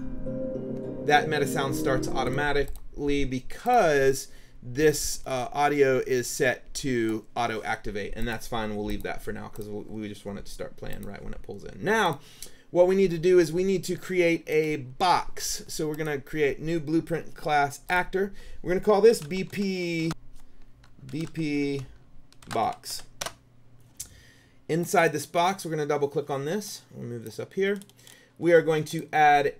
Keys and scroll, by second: 19.0-23.5 typing.